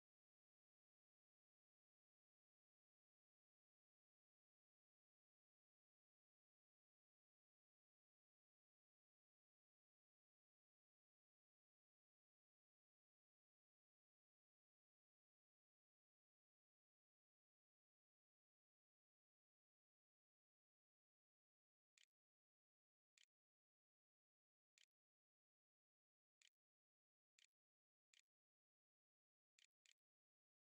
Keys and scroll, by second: 20.5-30.6 typing.